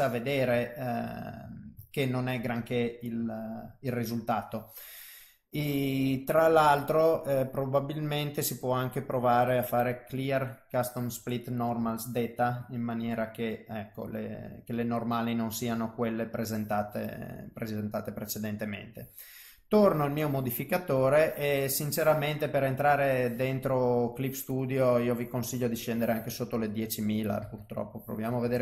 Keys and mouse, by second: 0.6 shift+middle click, 1.2 middle click, 1.9 ctrl+middle click, 2.5 middle click, 3.3 ctrl+middle click, 3.8 middle click, 8.6 click, 10.2 click, 11.4 middle click, 12.0 ctrl+middle click, 12.7 middle click, 15.1 middle click, 19.8 click, 21.1 click, 25.8 click.